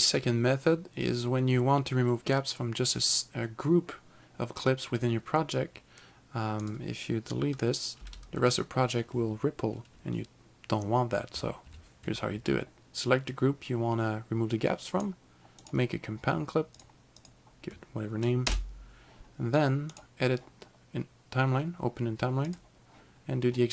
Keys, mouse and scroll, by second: 6.7 click, 8.0 Delete, 11.7 ctrl+z, 13.4 click, 15.7 right click, 16.8 click, 18.5 Return, 20.0 right click, 22.5 click.